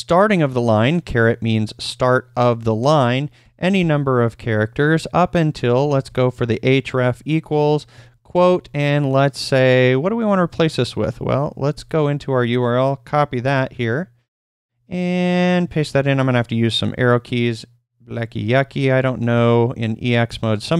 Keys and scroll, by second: 3.4-3.7 typing, 5.3-8.5 typing, 10.4 super+Tab, 11.7 super+l, 13.4 super+c, 13.7 super+Tab, 15.7 super+v, 18.6 Left, 19.3 \, 19.7 Right, 20.2 \.